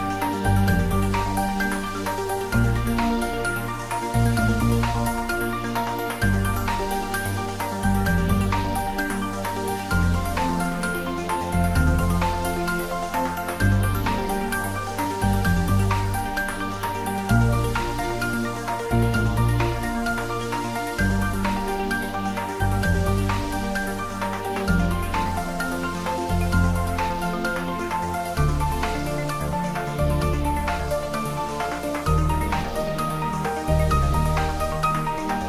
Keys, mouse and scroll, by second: 6.9 Tab, 9.1 Tab, 16.6 shift+n, 18.6-19.5 typing, 22.8-25.3 typing, 30.0 Return, 34.8 Tab.